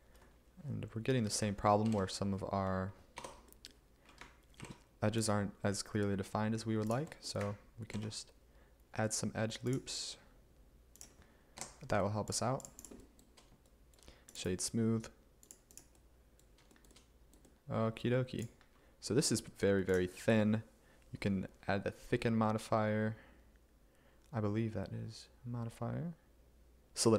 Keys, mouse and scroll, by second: 1.9 ctrl+r, 3.3 Tab, 4.7 ctrl+r, 8.0 ctrl+r, 12.7 Escape.